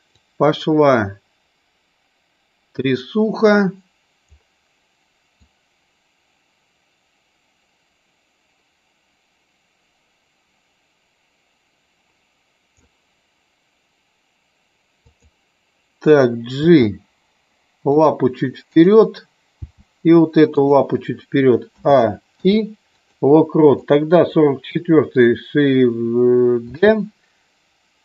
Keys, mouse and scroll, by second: 0.1-4.2 drag, 5.4-12.8 drag, 15.0 click, 16.6 g, 17.9 click, 18.6 click, 19.5 g, 21.6 a, 22.3 i, 23.7 click, 26.7 shift+d.